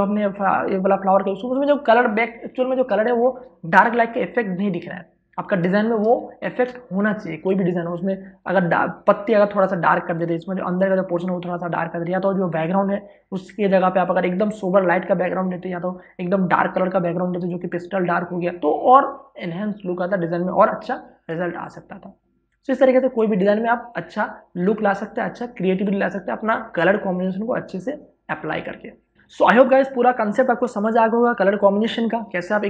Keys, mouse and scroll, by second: 0.2 click, 1.6 space, 1.8 ctrl+click, 6.3 space, 6.5 ctrl+click.